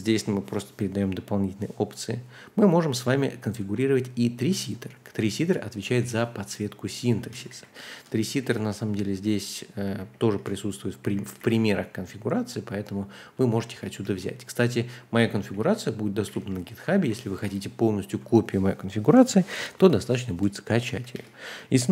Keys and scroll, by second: 5.4 super+c, 6.9 a, 7.3 Return, 7.5 super+v, 7.9 Escape, 8.4 ctrl+d, 10.0 ctrl+d, 10.3-14.0 typing, 15.4-17.0 typing, 19.9-21.9 typing.